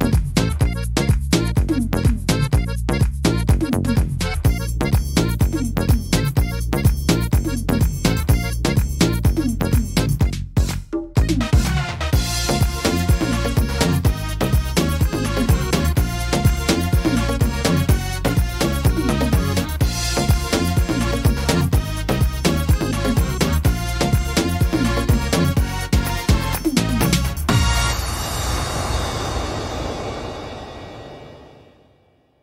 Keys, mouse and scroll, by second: 3.1 middle click, 3.9 middle click, 5.3 alt+s, 7.5 middle click, 8.7-9.2 scroll up 3, 9.2 shift+middle click, 10.0 right click, 10.6 alt+shift+right click, 12.0 click, 12.9 alt+shift+right click, 13.5 s, 14.7 right click, 16.1 click, 16.9 click, 19.3 right click, 20.3 click, 21.3 middle click, 21.6-22.1 scroll down 4, 22.1 middle click, 22.8 right click, 24.1 click, 25.0 right click, 25.8 click, 26.8 middle click, 27.1-28.0 scroll down 4, 27.6 middle click, 28.4 shift+middle click, 28.7 scroll up 3, 30.0 middle click, 30.0 scroll up 1, 30.8 scroll down 1, 31.1 middle click, 31.8-32.4 scroll up 2, 32.2 middle click.